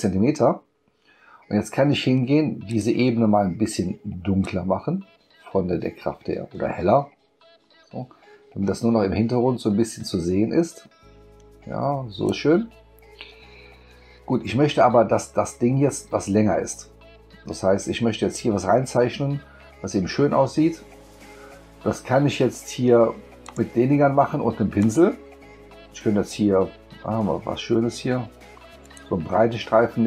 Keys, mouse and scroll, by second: 2.7 click, 4.4-12.3 drag, 23.4 click, 24.8 click, 27.1-27.5 scroll down 2, 27.5 scroll up 2, 28.8 click.